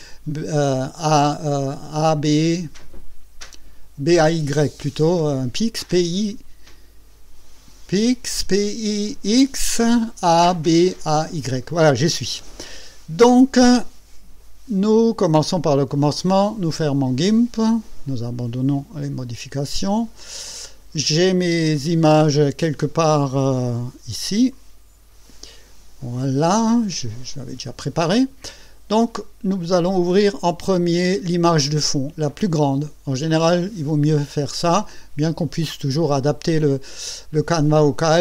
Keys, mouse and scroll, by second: 16.6 click, 18.7 click, 20.2 click, 24.5 click.